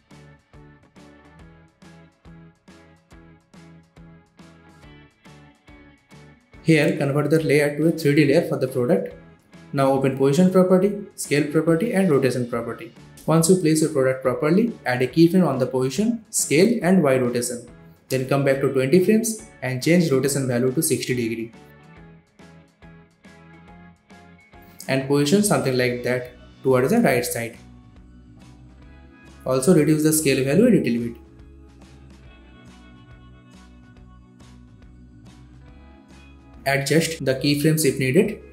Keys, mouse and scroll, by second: 0.8-2.1 drag, 12.0 shift+p, 13.5 click, 13.5-19.2 drag, 22.3-23.2 typing, 26.1-29.2 drag, 33.9 space, 35.5 space, 36.0-37.9 drag.